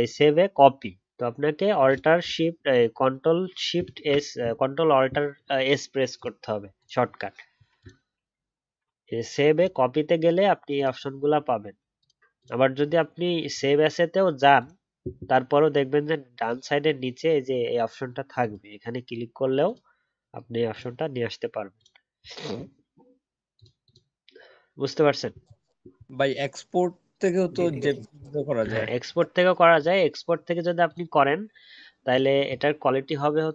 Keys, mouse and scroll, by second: 3.7 ctrl+alt+s.